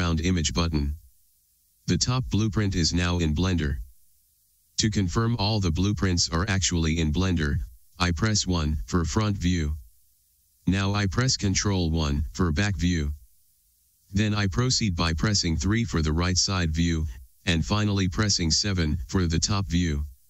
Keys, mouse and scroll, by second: 9.0 KP_1, 12.5 ctrl+KP_1, 16.4 KP_3, 18.7 KP_7.